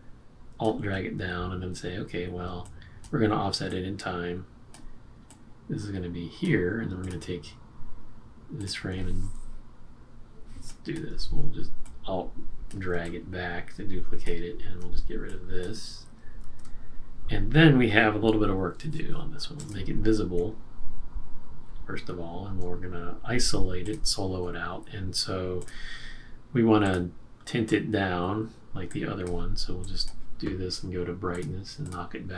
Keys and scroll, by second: 16.4 shift+F5.